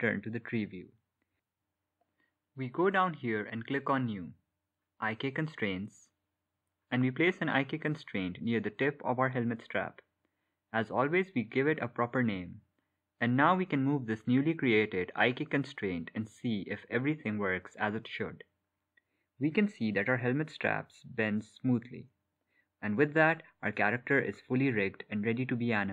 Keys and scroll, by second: 11.1-13.8 typing.